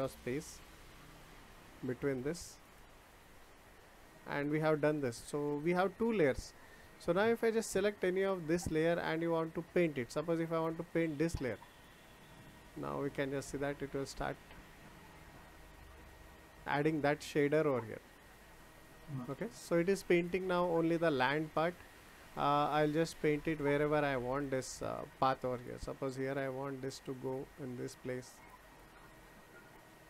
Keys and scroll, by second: 1.3 BackSpace.